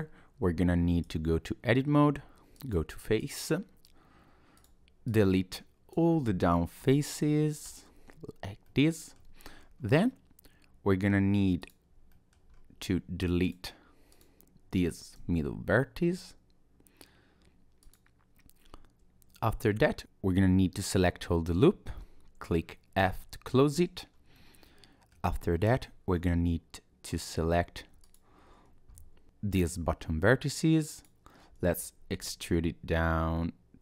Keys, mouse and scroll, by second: 1.1 Tab, 2.5 click, 3.2 click, 4.6 click, 5.1 click, 6.8 x, 8.7 middle click, 9.2 Tab, 9.6 scroll up 2, 9.8 Tab, 10.1-10.5 scroll down 2, 11.6 click, 12.1 middle click, 12.5-13.1 scroll up 1, 13.4 click, 14.1 click, 15.2 x, 23.0 f, 23.7 Tab, 24.0-24.4 scroll down 2, 24.4 middle click, 25.3 Tab, 27.1 alt+click, 28.0 alt+click, 31.0 click, 31.4-32.2 scroll up 1, 32.2 e.